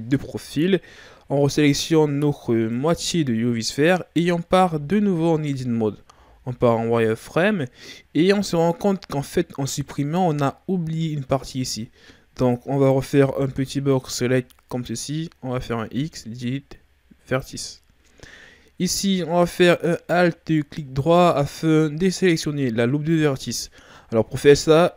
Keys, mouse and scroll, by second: 0.9-2.2 scroll up 6, 2.2-2.7 scroll up 3, 2.7 right click, 4.6 Tab, 6.2 z, 7.0-9.5 shift+scroll down 3, 12.8 right click, 13.2 b, 15.9 x, 20.8-23.8 alt+right drag.